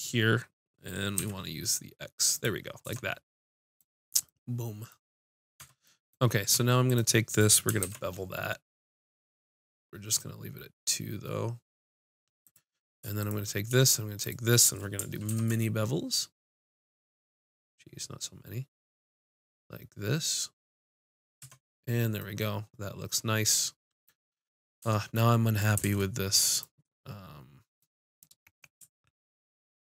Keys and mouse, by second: 2.8 Tab, 2.8 click, 5.6 Tab, 6.8-9.1 drag, 7.8 ctrl+b, 12.5-18.4 drag, 15.3 ctrl+b, 21.1-22.8 drag, 21.4 Tab, 24.8 Tab, 25.8 ctrl+Tab.